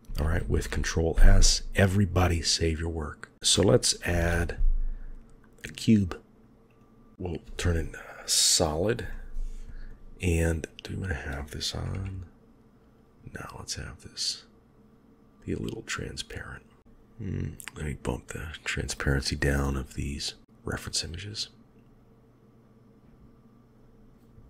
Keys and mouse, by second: 0.2 ctrl+s, 3.3 shift+middle click, 4.0 shift+a, 9.0-9.8 middle drag, 10.5 click, 11.8 KP_1, 14.2 click, 15.5-16.8 middle drag, 16.8 KP_3, 21.2 click, 21.7-24.0 drag.